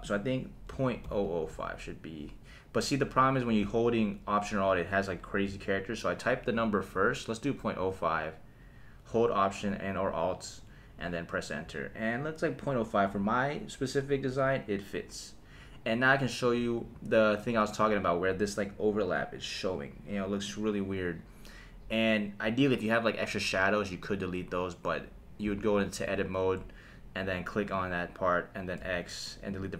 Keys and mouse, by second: 0.0-2.6 alt+drag, 1.1 alt+KP_0, 3.1 BackSpace, 19.1 click, 23.9 click, 26.0 Tab, 27.6 click, 28.8 x.